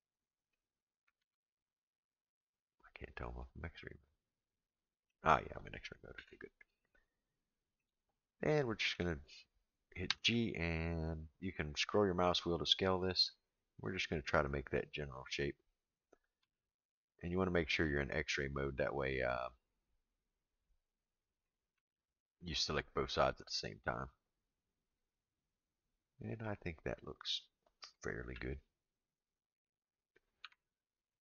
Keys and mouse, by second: 0.5 click, 1.2 alt+z, 3.7-5.1 middle drag, 6.1 KP_1, 7.3 shift+middle click, 8.7 shift+middle click, 10.1 g, 15.0 click, 16.4 g, 21.4 click, 21.7 g, 27.8 click, 28.2 g, 30.4 Tab.